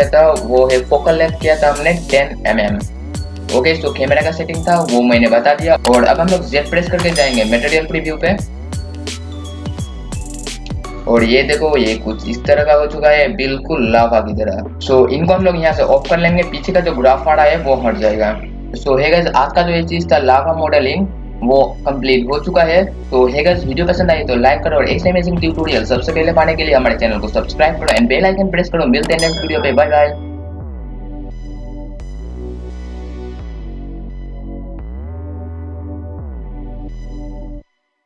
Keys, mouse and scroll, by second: 6.9 z, 8.6 click, 12.0-13.1 scroll up 1.